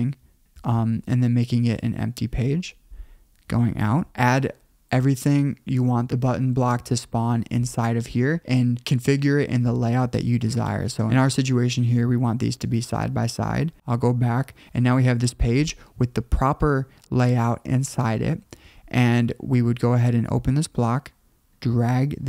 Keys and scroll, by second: 3.5 super+[, 14.1 super+[.